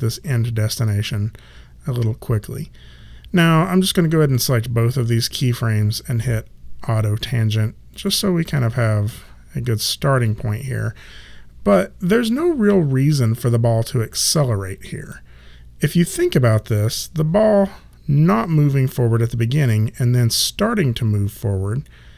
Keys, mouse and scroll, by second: 3.4 click, 7.9 click, 10.2 click, 16.8 click.